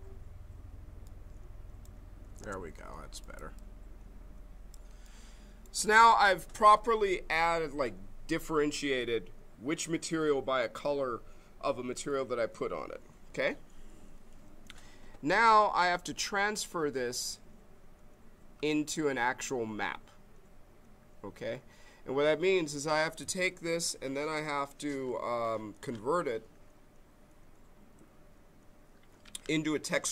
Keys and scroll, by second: 2.6 space.